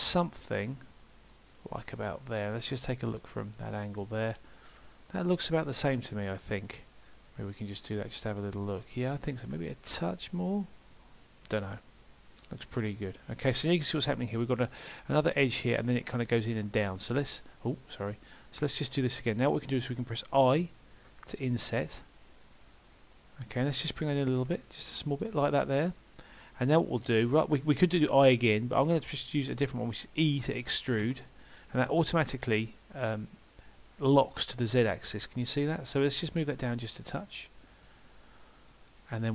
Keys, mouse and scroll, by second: 2.4 middle click, 5.7 middle click, 12.0 middle click, 16.6 middle click, 21.1 i, 26.7-29.9 scroll up 2.